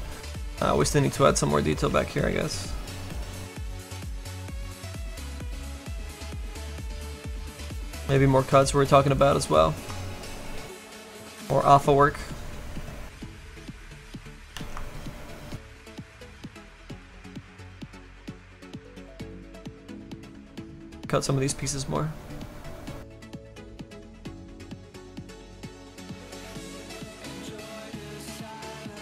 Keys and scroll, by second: 2.0 s, 2.4 s, 4.5 s, 5.7 s, 6.5 s, 7.1 s, 19.5 s, 20.2 s, 28.9 s.